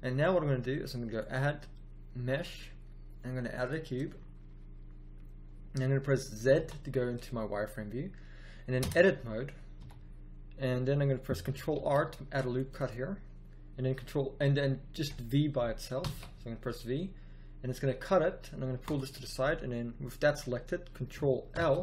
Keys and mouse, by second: 4.1-6.2 middle drag, 6.5 z, 8.8 Tab, 9.7 a, 11.7 ctrl+r, 15.9 v, 21.4 ctrl+l.